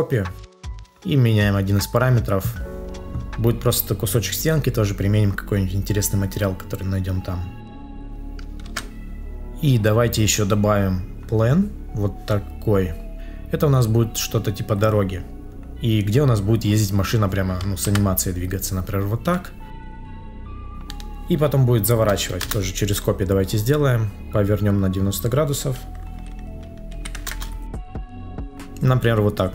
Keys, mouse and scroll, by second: 0.6 ctrl+z, 7.7 ctrl+z, 8.6 ctrl+s, 17.8 ctrl+z, 20.7 shift+click, 22.3 Return, 27.2 Return.